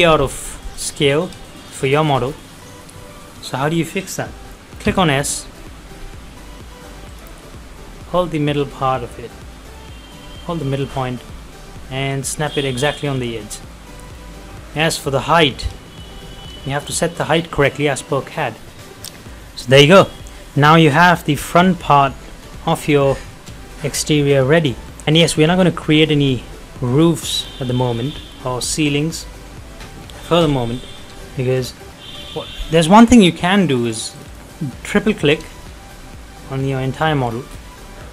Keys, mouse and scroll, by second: 0.4-0.7 scroll up 1, 0.7 middle click, 0.8 middle click, 2.3-2.6 scroll up 1, 2.6 middle click, 4.9 s, 5.3 middle click, 7.1 click, 8.6 middle click, 8.7-12.3 middle drag, 12.4 click, 12.8 scroll down 1, 13.1 middle click, 13.4 scroll up 1, 13.7 middle click, 13.7 middle click, 18.6 click, 19.1 middle click, 20.2-20.5 scroll up 1, 20.5 middle click, 20.6 middle click, 21.0 scroll down 1, 21.2 middle click, 21.6-22.0 scroll up 1, 22.0 middle click, 22.3 scroll down 1, 22.8 middle click, 23.3-25.0 shift+middle drag, 25.0 click, 25.2 middle click, 27.4-27.7 scroll down 1, 27.7 middle click, 28.2-28.8 scroll up 1, 30.7 scroll up 1, 30.8 middle click, 31.4 shift+middle click, 33.5 click, 35.1 middle click, 35.9-36.2 scroll up 1, 36.2 middle click, 37.3 scroll down 1, 37.7 middle click.